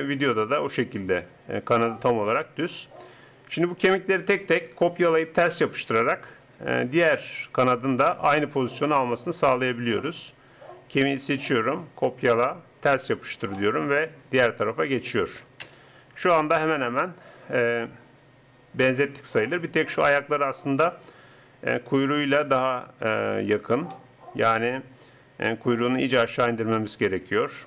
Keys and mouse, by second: 3.8-5.5 right drag, 5.7 click, 11.0-12.2 drag, 15.6 KP_0.